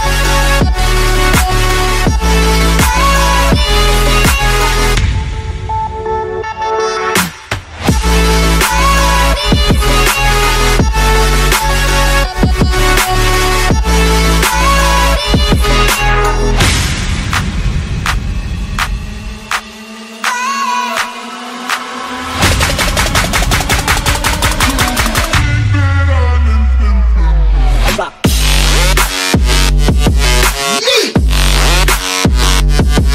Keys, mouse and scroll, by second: 0.4 click, 1.4 click, 2.1 click, 3.6 click, 3.6 click, 5.2 click, 5.5 click, 8.9 click, 9.7 click, 10.2 middle click, 10.3 middle click, 11.1 click, 12.4 click, 13.1 5, 14.2 middle click, 16.9 click, 19.1 click, 19.8 click, 20.8 click, 22.5 click, 23.2 click, 23.7 click, 24.8 click, 25.0 click, 25.3 F9, 32.5 click.